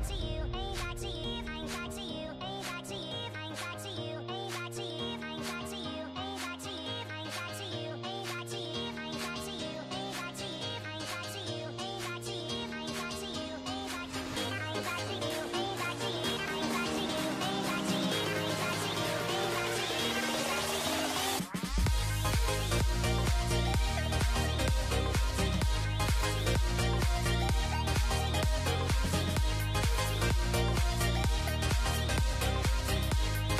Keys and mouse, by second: 0.5 k, 1.7-3.4 typing, 4.7 k, 5.9 alt+h, 6.1 a, 6.2 a, 6.3 w, 6.7 a, 7.1 Tab, 7.6 ctrl+a, 7.9 ctrl+a, 9.6 alt+h, 10.4 middle drag, 10.9 right drag, 11.2 z, 11.4 z, 12.8 ctrl+j, 13.6 shift+h, 14.1 Tab, 14.5 alt+h, 15.4 a, 15.5 a, 15.7 w, 16.1 a, 17.2 z, 19.0 middle click, 19.4 middle click, 21.7 middle click, 22.8 middle click, 23.1 z, 23.9 middle drag, 24.2 a, 24.8 l, 25.0 middle click, 25.9 middle click, 26.8 z, 27.2 z, 27.5 shift+h, 28.1 p, 28.5 Tab, 29.5-31.2 typing, 30.7 Tab, 31.6 Delete, 32.2 Tab, 33.1 z.